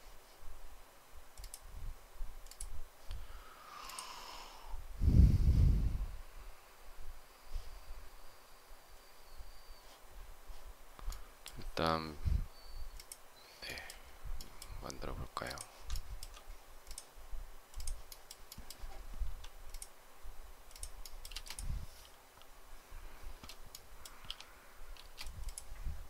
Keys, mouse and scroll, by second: 15.8 shift+middle click, 21.2 space, 24.8 space.